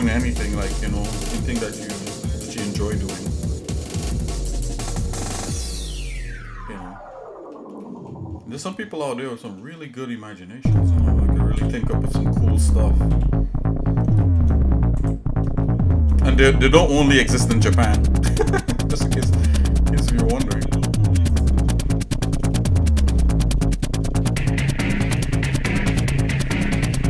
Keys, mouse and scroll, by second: 0.6 g, 6.4-7.6 shift+middle drag, 7.8 shift+middle click, 8.6 shift+middle click, 9.8 shift+middle click, 11.5 g, 15.6 shift+middle click, 16.7 shift+middle click, 17.7 middle click, 19.5 scroll up 1, 21.3 click, 22.5 shift+middle click, 23.1-24.7 shift+middle drag.